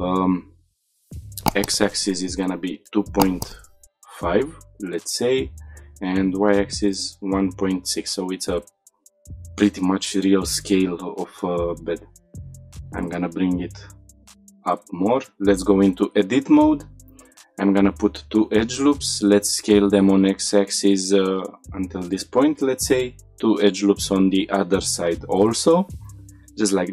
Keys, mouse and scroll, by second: 1.6-5.5 drag, 5.9-7.9 shift+drag, 9.0 ctrl+a, 9.7-10.1 scroll up 2, 10.9 g, 11.0 z, 12.3 click, 12.4 shift+middle click, 12.6-13.0 middle drag, 13.0-13.5 scroll up 1, 13.5-14.8 middle drag, 14.8 Tab, 16.7 ctrl+r, 18.3 right click, 18.9 s, 19.6 x, 21.7 click, 22.6 ctrl+r, 24.5-25.9 right drag, 25.9 s, 26.5 y.